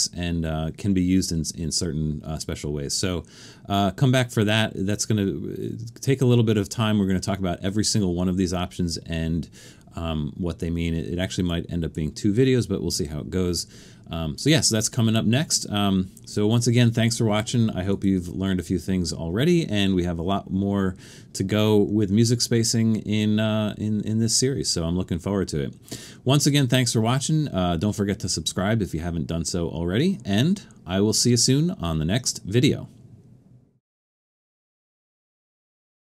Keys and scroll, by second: 31.4 typing.